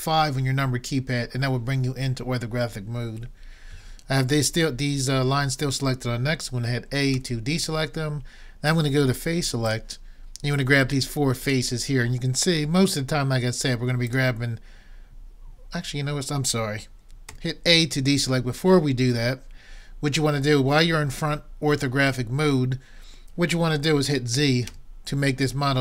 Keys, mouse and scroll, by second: 7.2 a, 8.0 middle click, 9.7-13.2 drag, 14.1-15.9 drag, 17.3 a, 24.7 z.